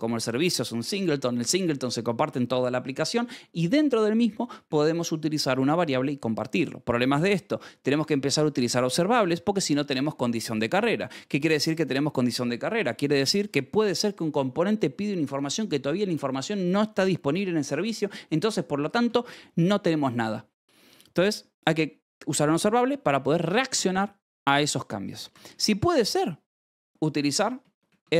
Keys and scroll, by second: 8.1 Escape, 8.4 l, 9.1 Escape, 9.3 j, 9.7 k, 12.7-13.8 typing, 19.0 v, 20.0 b, 20.0 Escape, 22.1 l, 23.1 e, 23.6 Escape, 27.5 space, 27.8 r.